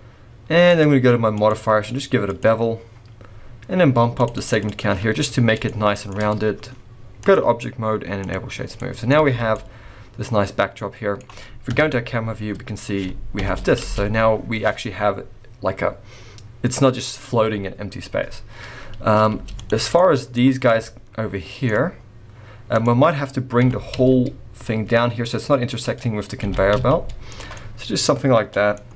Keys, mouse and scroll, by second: 0.6 click, 0.7 click, 1.3-4.5 click, 4.1 click, 4.3 click, 4.6 click, 5.3-5.6 scroll up 2, 5.6 shift+middle click, 7.2 click, 8.6 scroll down 4, 8.8 middle click, 9.2 alt+a, 9.5 middle click, 11.7 KP_0, 12.4-13.0 scroll up 4, 13.4 shift+Left, 13.8 space, 19.3 space, 19.5 click, 19.8 scroll down 3, 19.9 middle click, 20.8 shift+middle click, 21.9-22.7 scroll down 2, 22.7 click, 23.6 g, 26.4 g, 27.5 scroll down 1, 27.5 middle click.